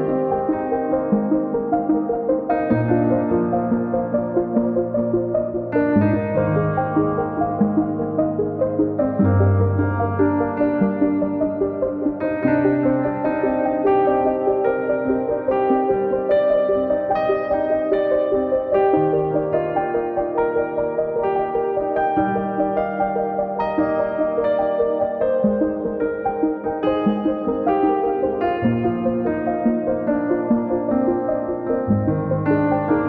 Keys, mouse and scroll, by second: 2.8-4.5 drag, 4.5 KP_Decimal, 6.8 shift+click, 7.9 shift+click, 9.6 shift+click, 10.3 KP_Decimal, 11.8 shift+click, 13.6 shift+click, 14.9 shift+click, 16.0 shift+click, 17.0 shift+click, 18.1 shift+click, 19.3 shift+click, 21.2 shift+click, 21.6 shift+click, 22.2 shift+click, 22.6 shift+click, 23.8 shift+click, 24.3 shift+click, 25.5 shift+click, 28.9 shift+click, 30.6 shift+click.